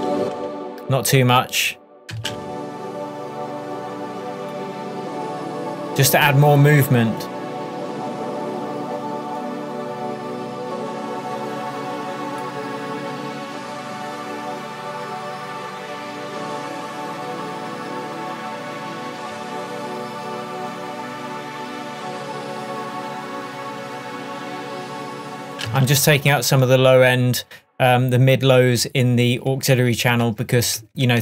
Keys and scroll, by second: 2.2 space, 19.4 Tab, 25.7 space, 30.3 shift+Tab.